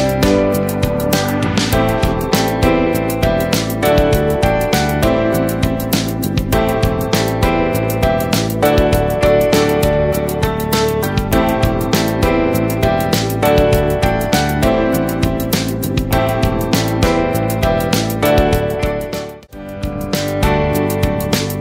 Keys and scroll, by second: 0.0 ctrl+c, 0.8 Tab, 0.8 space, 5.9 ctrl+z, 7.4 ctrl+v, 9.1 ctrl+t, 16.3 Delete, 17.6 ctrl+-, 18.8 ctrl+space, 19.3 ctrl+space, 20.5 ctrl+space.